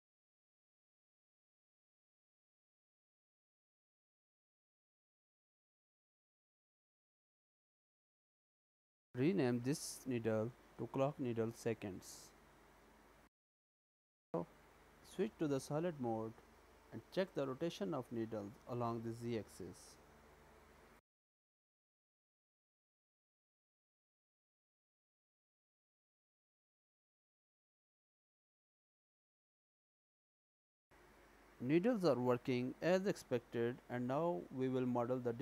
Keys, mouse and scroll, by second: 3.5 s, 6.8 middle click, 7.9 Tab, 8.4 click, 9.0-9.8 scroll down 1, 9.8-10.5 scroll down 1, 10.5 click, 10.7 click, 13.2 middle click, 14.3-14.7 scroll down 2, 14.7 z, 15.6-16.1 scroll down 2, 16.1 click, 16.6 middle click, 17.7-18.4 scroll up 1, 18.4 click, 18.4-18.7 scroll up 1, 19.3 r, 23.6 click, 24.1-25.2 scroll down 2, 25.2 r, 28.5 middle click, 29.6 click, 30.2 middle click, 31.5 scroll down 2.